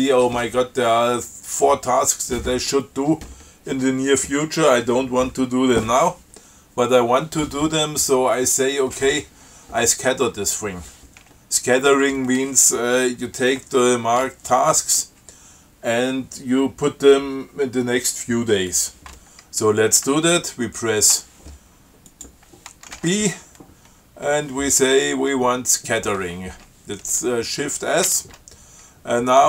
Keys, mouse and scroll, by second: 22.3 click, 23.2 shift+b, 28.3 shift+s.